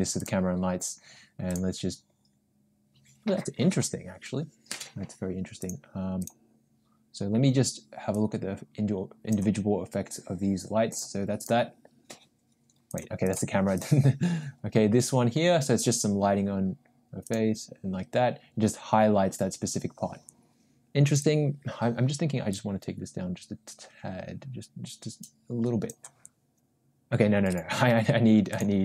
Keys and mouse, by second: 1.5-1.8 drag, 5.6 click, 8.1-9.6 drag, 10.9 drag, 11.4 click, 12.9 click, 13.3 click, 13.8 click, 17.3 click, 21.1 click, 22.5-26.0 drag, 28.5 click.